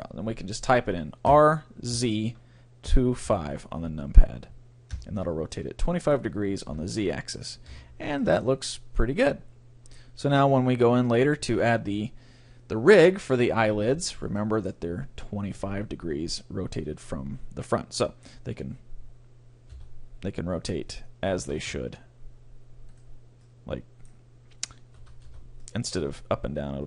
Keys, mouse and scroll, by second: 1.3 r, 5.5-7.4 middle drag, 6.7 KP_1, 7.7 Tab, 7.9-9.9 middle drag, 10.2 middle click, 10.8-12.5 right drag, 11.4 middle click, 12.6 middle click, 14.4-16.2 middle drag, 18.0-19.7 middle drag, 19.9 Tab, 21.3 r, 22.9-24.7 right drag, 23.4-25.1 middle drag, 25.0 a, 25.3 Tab, 25.6-26.8 middle drag.